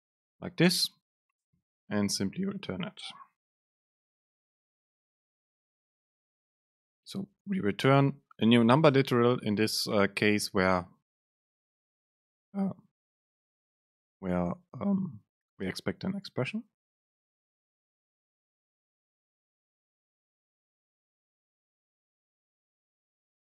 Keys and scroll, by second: 0.5 Down, 1.6 Up, 2.0 Right, 2.2 End, 2.6 shift+Left, 5.3 BackSpace, 6.4 Up.